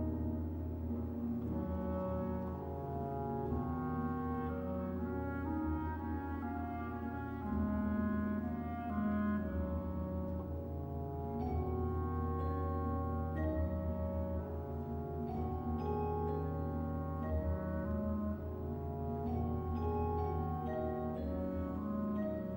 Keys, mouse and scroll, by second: 0.0 click, 2.1 click, 4.0-6.2 middle drag, 6.6 click, 12.3 click, 15.2 click.